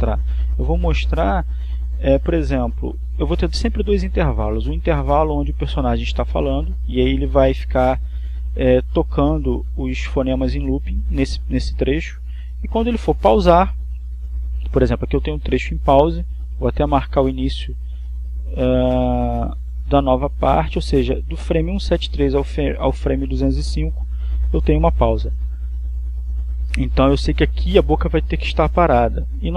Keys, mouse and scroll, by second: 10.5-11.7 drag, 14.1-15.9 drag, 17.7-19.4 drag, 20.4-21.6 drag, 28.4-29.5 drag.